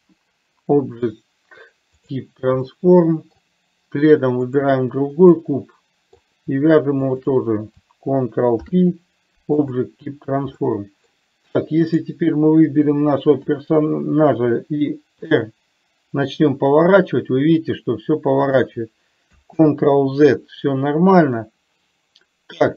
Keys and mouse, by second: 2.8-3.6 middle drag, 4.7 click, 5.6-6.4 middle drag, 7.3 shift+click, 8.7 ctrl+p, 10.8-11.2 middle drag, 12.2 click, 13.7 KP_7, 15.6 r, 19.8 ctrl+z, 21.4-22.7 middle drag.